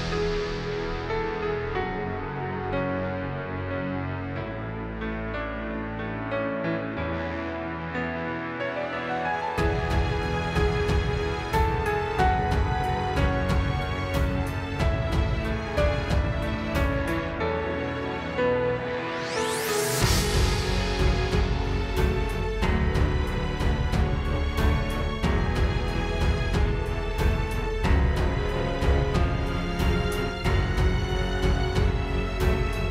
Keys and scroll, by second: 2.3 space, 3.9 ↻, 4.1 space, 5.8 shift+super+i, 10.9 space, 11.3 space, 11.8 space, 12.8 space, 26.6 space.